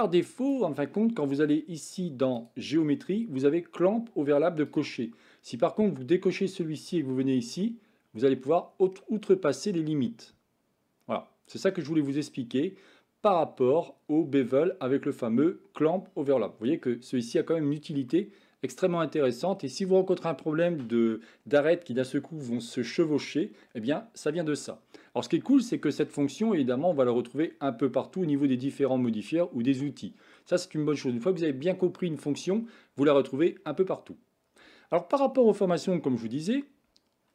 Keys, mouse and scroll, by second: 2.2 click, 4.6 click, 6.9-14.7 drag, 18.1-19.2 middle drag, 25.4-26.0 shift+middle drag, 29.3-30.4 middle drag.